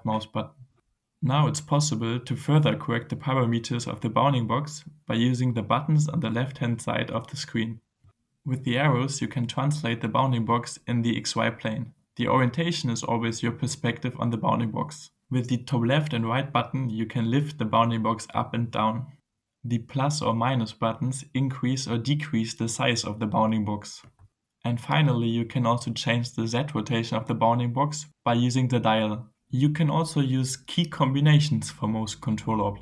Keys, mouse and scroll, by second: 1.6-3.2 drag, 9.3 click, 10.2 click, 10.9 click, 11.8 click, 17.0 click, 17.9 click, 19.0 click, 20.8 click, 22.1 click, 23.5-26.8 drag, 32.7-32.8 typing.